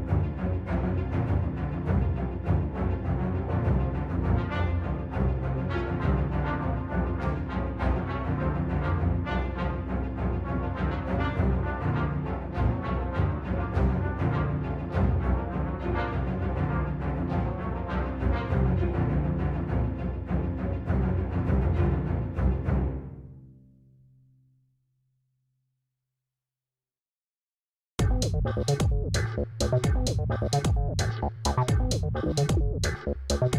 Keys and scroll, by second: 3.4 0, 7.0 g, 28.0 0, 32.5 5, 33.0 Return.